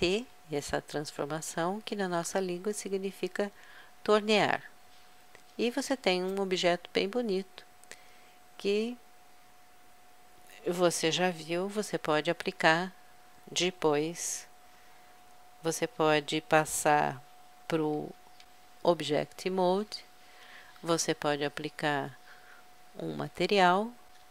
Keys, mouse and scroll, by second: 12.6 a, 18.2 Tab, 22.7-24.3 drag.